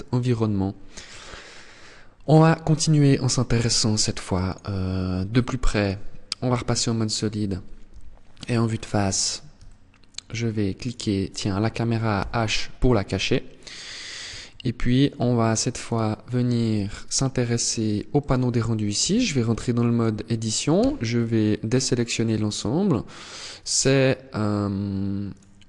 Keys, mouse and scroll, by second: 3.6 click, 6.3-7.5 scroll up 1, 7.5 KP_1, 8.3-8.7 scroll up 6, 9.3 shift+middle click, 9.8-10.2 shift+scroll up 1, 10.5 right click, 11.8 h, 13.4-13.8 scroll up 2, 13.9 scroll down 1, 14.1 shift+middle click, 14.9 scroll up 1, 15.5 right click, 17.7 click, 18.7 Tab, 20.5 a, 22.5 middle click, 24.9 right click.